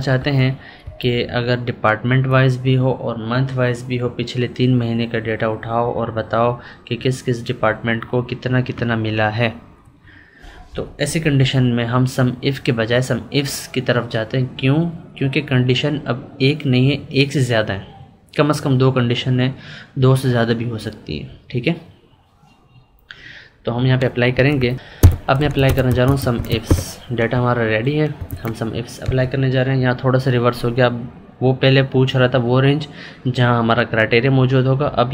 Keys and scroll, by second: 0.8 Up, 10.4 Right, 11.3 Down, 24.3 Left, 24.8 Up.